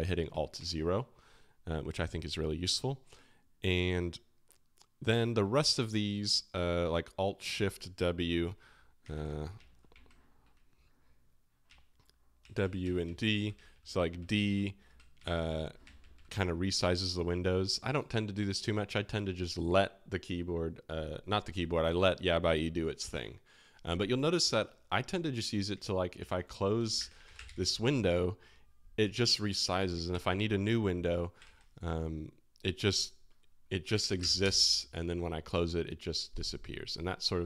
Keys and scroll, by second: 0.3 alt+o, 0.5 alt+o, 9.1 super+n, 9.9 alt+shift+a, 12.4 alt+shift+w, 12.6 alt+shift+w, 12.8 alt+shift+d, 13.0 alt+shift+d, 14.8 alt+shift+a, 15.1 alt+shift+s, 15.3 alt+shift+s, 15.8 alt+shift+d, 16.0 alt+shift+d, 26.1 super+w, 26.7-27.8 typing, 30.1 super+n, 31.4 alt+shift+0, 33.6-34.7 typing, 37.3 typing.